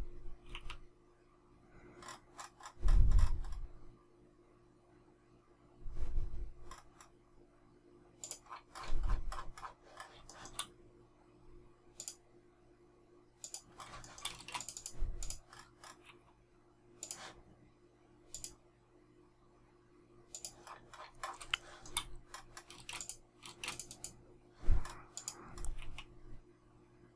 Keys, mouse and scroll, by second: 10.2 shift+middle click, 13.9 shift+middle click, 14.3 space, 21.5 shift+middle click, 22.6 space.